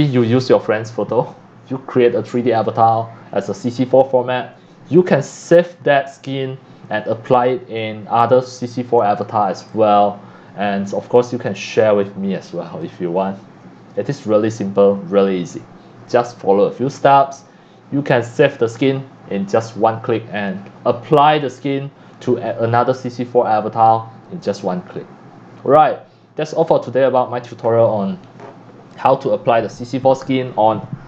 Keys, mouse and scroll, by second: 7.8-8.6 drag, 9.0-9.7 drag, 11.4 click, 12.8 click, 14.1 click, 14.5 click.